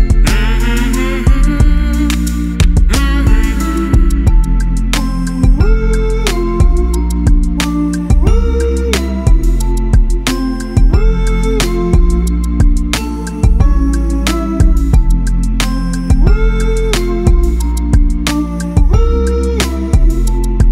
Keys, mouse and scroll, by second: 5.1 click, 10.2 a, 11.4 click.